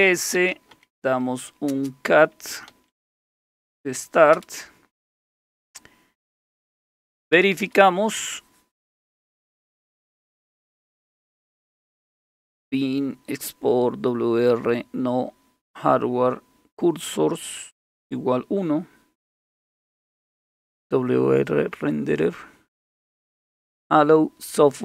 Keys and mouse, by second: 0.0-3.7 typing, 4.3 Return, 6.5 Return, 6.7 Return, 6.9 Return, 7.0 Return, 7.2 Return, 7.4 Return, 7.6 Return.